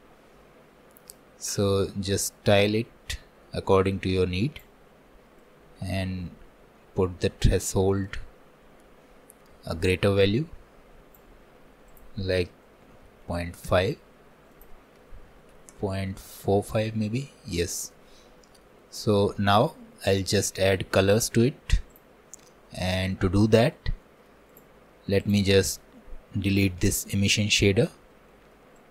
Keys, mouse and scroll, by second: 13.7-18.0 drag, 18.0 middle click, 18.8 scroll down 1, 19.1 middle click, 19.6 scroll up 3, 20.1-25.3 shift+middle drag, 20.5-20.8 scroll down 1, 22.0 click, 22.3 scroll up 1, 25.3-26.9 drag, 26.9 Delete, 26.9-28.9 middle drag.